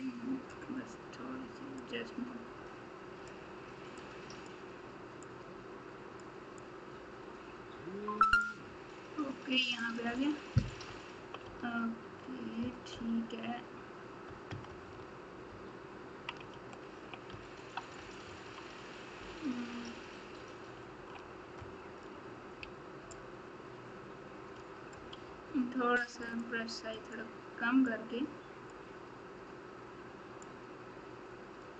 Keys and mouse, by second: 1.7-3.3 drag, 4.0 click, 5.2 click, 6.6-8.4 drag, 9.8 click, 10.8 KP_4, 12.9 KP_7, 14.5 KP_Add, 18.2 KP_6, 19.2 KP_7, 21.6 KP_Add, 25.2 f, 26.9 click, 27.8 click, 30.4-31.7 drag.